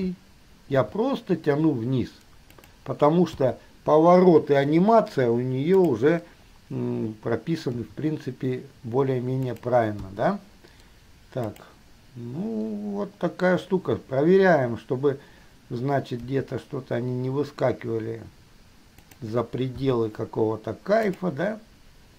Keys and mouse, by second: 1.0 g, 3.5 i, 6.0 click, 8.0 g, 10.2 i, 11.7 click, 16.5 g, 20.0 i, 21.3 click.